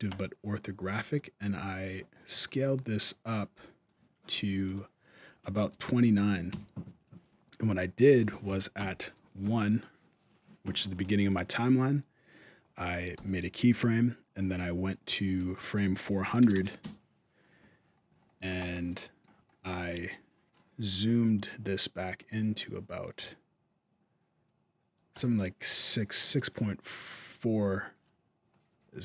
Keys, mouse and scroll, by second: 0.9 click, 4.4 click, 8.6 shift+Left, 12.9 i, 15.2 click, 16.3 KP_0, 17.6-19.2 scroll down 20, 18.7 middle click, 19.2 scroll up 1, 20.3 click, 24.9 click.